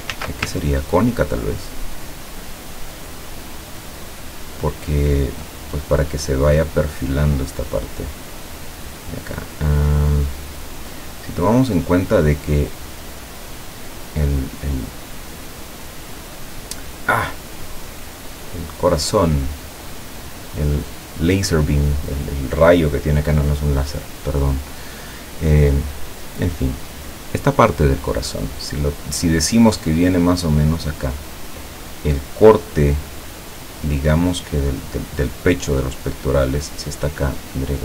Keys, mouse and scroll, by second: 0.2 ctrl+z, 1.0-5.4 ctrl+drag.